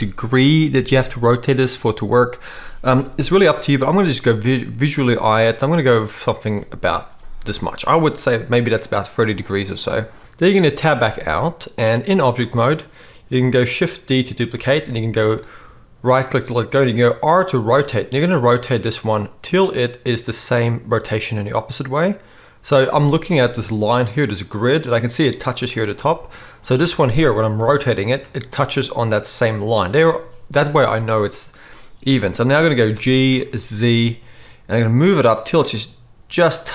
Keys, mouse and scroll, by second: 3.8 r, 10.2 Tab, 10.2 middle click, 10.2 x, 10.9 Tab, 14.5 shift+d, 16.8 r, 19.8-36.7 middle drag, 27.5 r, 32.9 g.